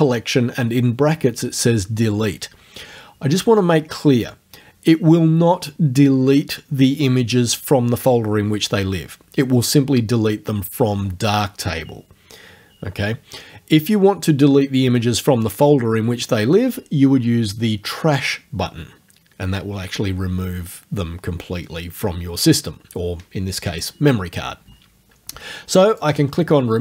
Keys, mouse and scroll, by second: 25.9 click.